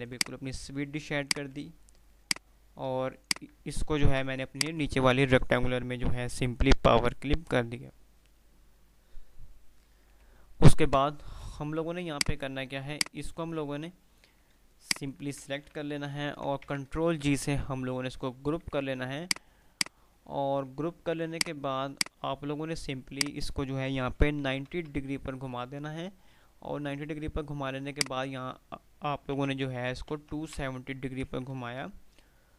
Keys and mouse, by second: 0.3 click, 0.6 F2, 1.3 F2, 2.3 click, 4.3 o, 4.7 click, 11.1 F3, 12.3-13.6 drag, 15.7 ctrl+g, 15.7 Delete, 16.6 ctrl+z, 16.6 F3, 19.3 click, 20.0 F2, 21.1-23.7 drag, 28.0-28.7 drag.